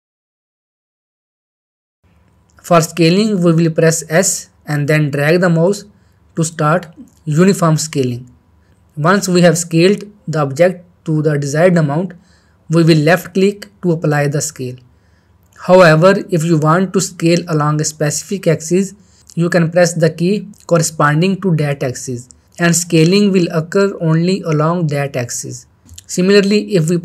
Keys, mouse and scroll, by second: 0.1 right click, 1.2 middle click, 1.4 shift+middle click, 1.7 shift+middle click, 4.7 shift+middle click, 5.4 s, 20.5 z, 26.7 click.